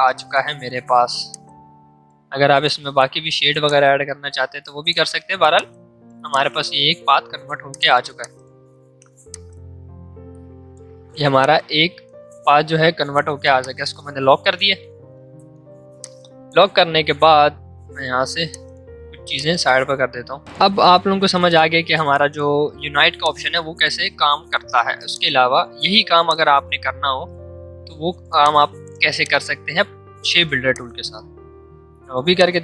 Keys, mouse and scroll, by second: 5.5-7.7 shift+drag, 9.3-13.0 alt+drag, 13.0 ctrl+2, 13.6-18.5 drag, 21.8 l, 23.2-24.6 shift+drag, 24.6 v, 25.0 space, 25.1-28.3 drag, 28.3 space, 28.4 click, 29.2-32.6 alt+drag.